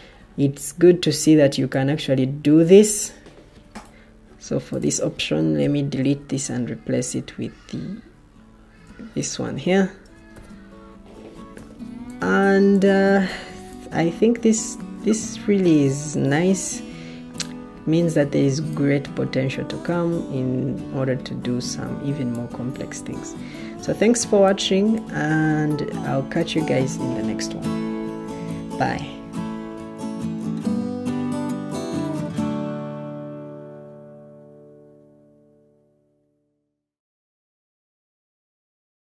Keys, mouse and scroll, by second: 3.7 Escape, 5.5 Delete, 10.9-11.4 scroll, 11.4 scroll, 16.2 o.